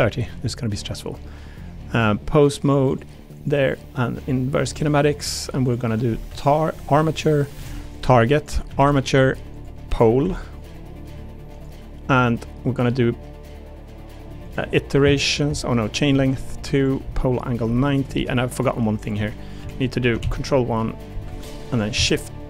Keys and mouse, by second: 1.9 click, 2.9 click, 3.4 click, 5.6-6.8 drag, 7.2 click, 8.3 click, 9.6-11.6 drag, 14.4-15.5 drag, 15.8 click, 16.7-18.1 drag, 18.5 click, 19.0 click, 19.6 KP_1, 20.2 ctrl+KP_1, 21.2 Escape, 21.7 click, 21.9 a.